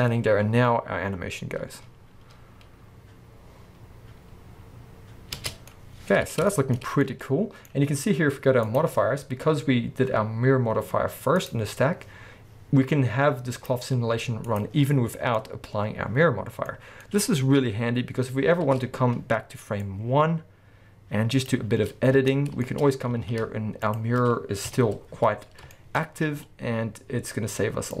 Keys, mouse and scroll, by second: 5.6 space, 5.7 scroll down 2, 6.8 scroll up 2, 8.7 click, 8.8-11.4 middle drag, 11.4 click, 13.5 click, 14.5 click, 15.4-20.1 middle drag, 16.9 scroll down 2, 20.1-22.2 drag, 21.8-22.2 scroll up 2, 22.2 b, 22.6 shift+middle click, 22.8-23.2 scroll up 2, 23.2 shift+a, 23.8 alt+shift+click, 24.7 KP_1, 25.2-25.7 scroll up 2, 25.7 shift+middle click, 26.0-26.3 scroll up 2, 27.9 middle click.